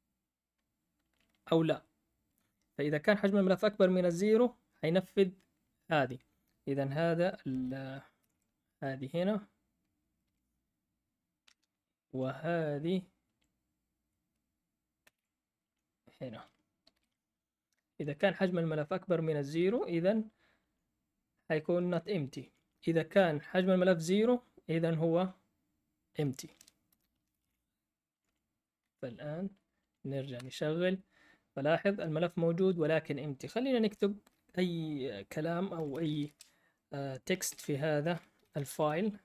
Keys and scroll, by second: 7.9-9.2 typing, 10.2 p, 11.4 Right, 11.7-12.5 typing, 14.8-15.5 typing, 16.9 shift+p, 22.3 Up, 22.3 Down, 22.5 Down, 26.8 Escape, 27.2 typing, 28.8 Up, 30.4 Return, 35.4-39.2 typing.